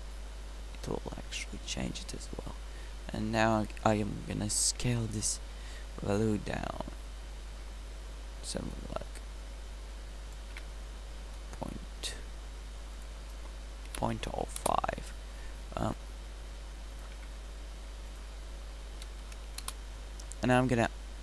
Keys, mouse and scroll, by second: 11.7 middle click.